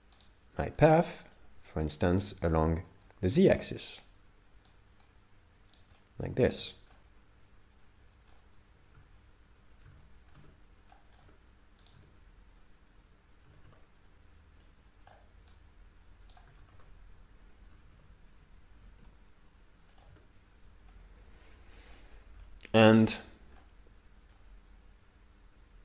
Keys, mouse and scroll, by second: 0.3 right click, 0.6 middle click, 1.4 click, 2.2 right click, 2.4 right click, 4.0 right click, 4.9 right click, 6.0 middle click, 6.6 Tab, 6.9 middle click, 9.0 alt+a, 10.0 alt+a, 10.4 Tab, 10.9 middle click, 11.2 Tab, 11.9 right click, 12.0 Tab, 13.4 a, 13.8 a, 14.7 click, 15.5 right click, 16.6 ctrl+z, 17.7 a, 17.9 a, 18.7 g, 20.1 Tab, 20.9 middle click, 22.1 scroll up 4, 22.4 middle click, 23.6 middle click.